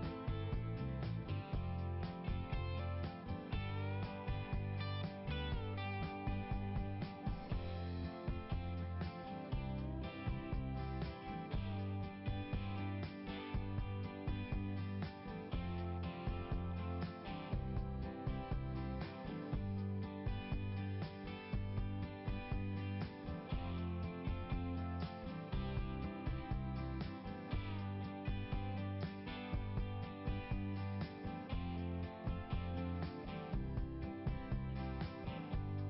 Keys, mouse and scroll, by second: 4.9 click, 8.1 click, 8.3 click, 8.5 ', 11.5 click, 11.6 click, 16.0 scroll up 1, 23.0 scroll down 1, 25.6 click, 27.5 click, 27.9 click, 28.5 scroll up 1, 33.4 scroll down 1, 34.8 scroll up 1.